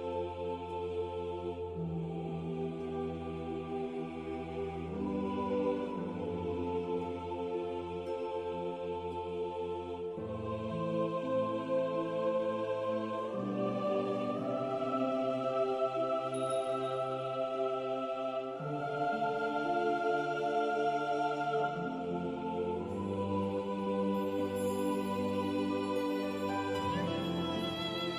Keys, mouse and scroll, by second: 2.2-2.6 scroll up 1, 3.9 click, 8.1-8.4 scroll down 1, 9.3 e, 10.1 click, 10.7 w, 11.4 scroll down 1, 11.6 scroll up 1, 12.4 click, 22.8 scroll down 1, 24.7-25.2 scroll up 1, 25.2 click, 25.8 middle click, 26.8 click.